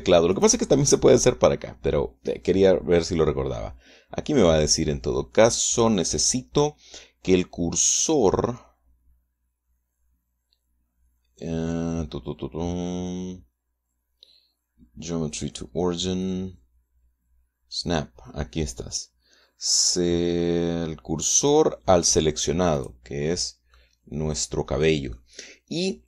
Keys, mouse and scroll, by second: 0.9 click, 23.4 click, 24.4-25.9 drag, 25.9-26.0 middle drag.